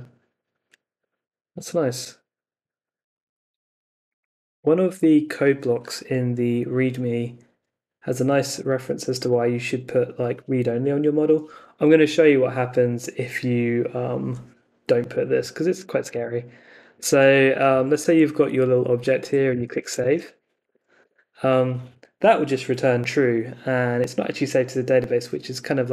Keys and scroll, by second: 16.1 super+Tab, 18.6 Up, 19.2-20.6 typing, 21.0 Return.